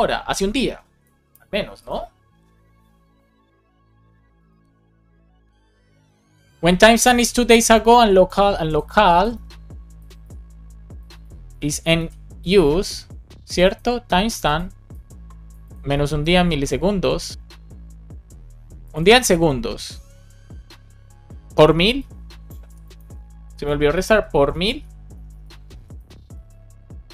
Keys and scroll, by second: 1.2 super+s, 11.4 space, 11.8 super+s, 22.6 super+c, 22.9 super+space, 23.6 super+v, 24.1 shift+8, 25.1 BackSpace, 26.3 BackSpace.